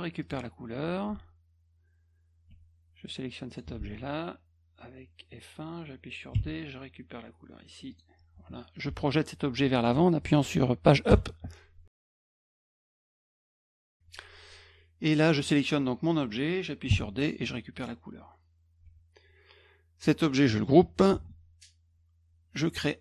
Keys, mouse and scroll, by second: 0.2 click, 2.5 F1, 3.5 click, 6.3 d, 7.9 click, 8.9 F1, 15.4 click, 16.9 d, 17.8 click, 18.8 F1, 21.1 ctrl+g.